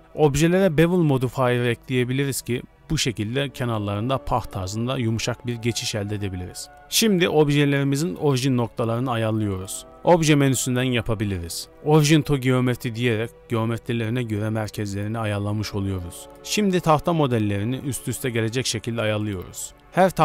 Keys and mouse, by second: 6.7 s, 9.5 s, 10.7 KP_1, 11.4 g, 12.3 r, 14.0 r, 16.2-16.5 shift+middle drag, 16.5 g, 17.6-19.8 g, 19.8 r.